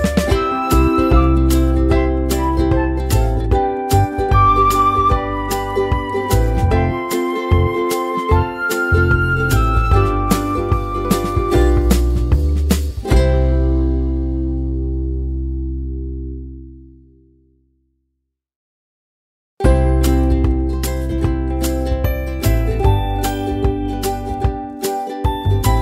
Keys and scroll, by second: 17.1-18.5 typing.